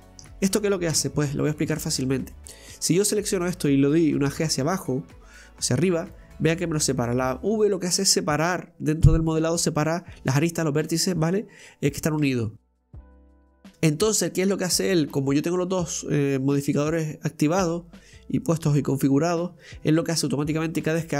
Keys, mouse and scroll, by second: 1.0 Tab, 1.3-1.7 scroll up 1, 1.7 shift+middle click, 2.1-2.8 scroll up 2, 2.8 right click, 4.3 g, 6.9-9.9 scroll down 1.